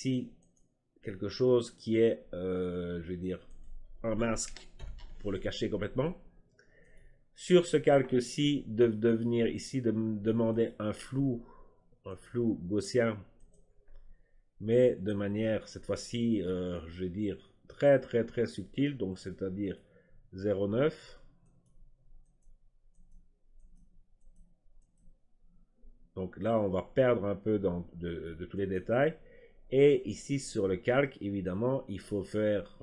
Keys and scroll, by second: 4.7 ctrl+i.